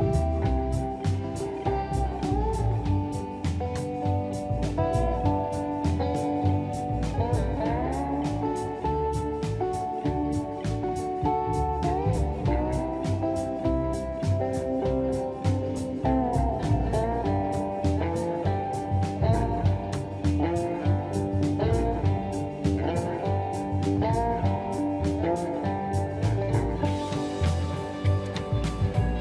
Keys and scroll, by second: 0.5 m, 8.2 shift+space, 12.0 ctrl+shift+g, 13.2 shift+Delete, 15.3 g, 21.1 m, 25.4 space.